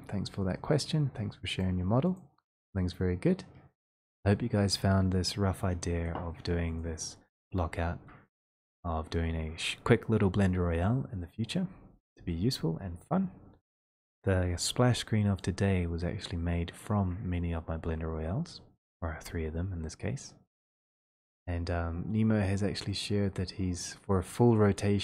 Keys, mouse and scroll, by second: 1.6 click, 2.1 click, 6.8 click, 8.1 click, 15.4 click, 15.6 click, 15.7 scroll down 2, 16.4 scroll down 1, 20.6-21.4 scroll, 23.0 click.